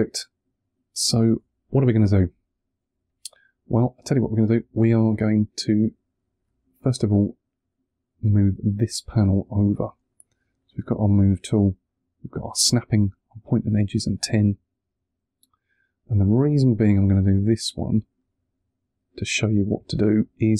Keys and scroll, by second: 2.8 1, 14.1 2, 19.8 2.